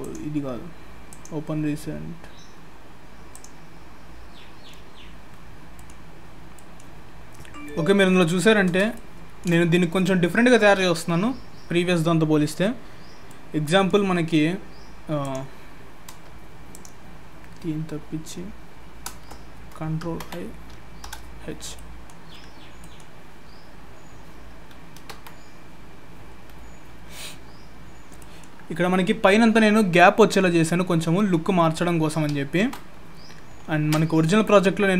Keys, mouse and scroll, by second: 27.5-28.2 scroll up 3, 28.2 middle click, 33.0 ctrl+s.